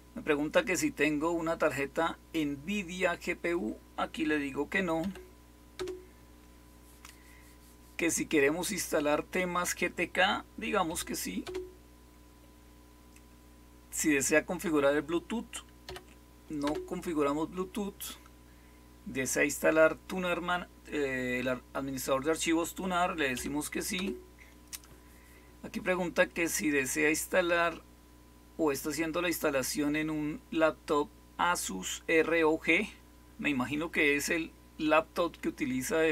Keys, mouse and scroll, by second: 4.9 n, 5.7 Return, 10.8 y, 11.4 Return, 15.8 n, 16.6 Return, 23.3 y, 23.9 Return.